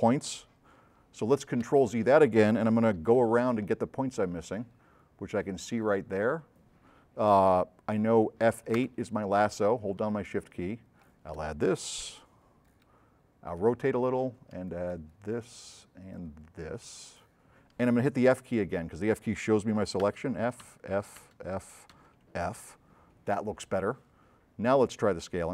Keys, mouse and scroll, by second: 1.7 z, 2.9 s, 3.2-5.8 right drag, 8.9 F8, 10.4 shift+click, 12.1 click, 12.1 s, 12.8 right click, 14.7-15.7 shift+drag, 15.9-17.4 shift+drag, 20.2 f, 20.8 f, 22.0 f.